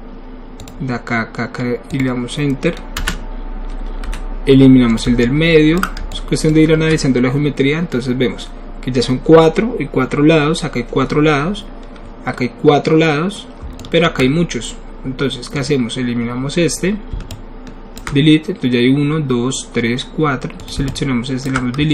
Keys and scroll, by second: 3.0 Return, 4.0 w.